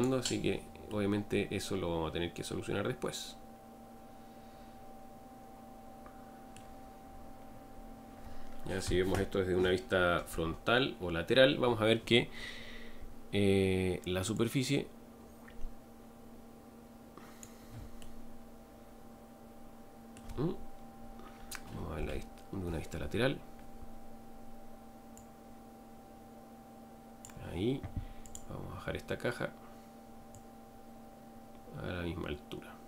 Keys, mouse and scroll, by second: 0.0 click, 0.9-3.9 middle drag, 7.1-7.9 scroll up 4, 10.3 KP_1, 12.3 scroll up 2, 15.1 Left, 18.0-22.0 middle drag, 22.0 KP_3, 23.3 scroll down 1, 25.3 click, 28.4 click, 30.5 click.